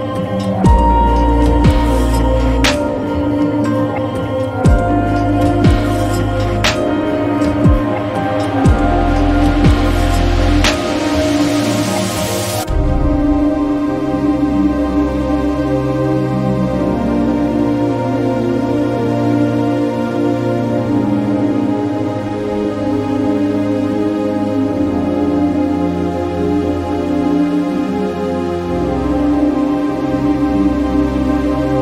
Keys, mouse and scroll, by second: 0.5 3, 1.5 Return, 3.3 click, 5.7-6.9 drag, 17.9 click, 17.9 click, 24.1 click, 26.5 click, 29.2 click.